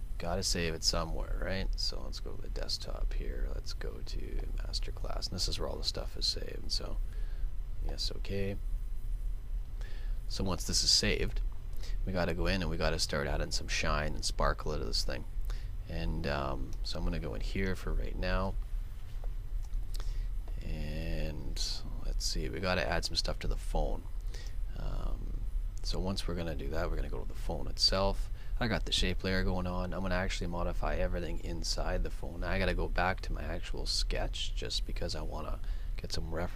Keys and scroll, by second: 32.6 super+Tab.